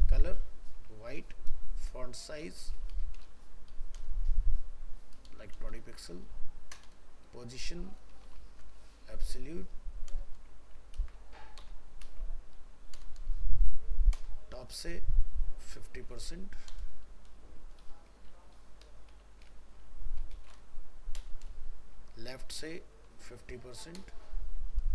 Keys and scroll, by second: 11.0 ctrl+space.